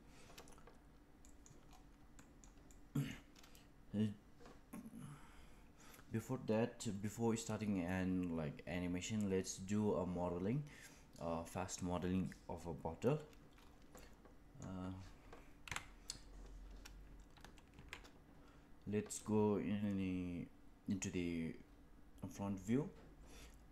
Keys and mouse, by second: 1.1 middle drag, 2.1 shift+middle drag, 2.6-3.0 middle drag, 13.9-14.5 middle drag, 15.6 KP_1, 17.6 shift+a.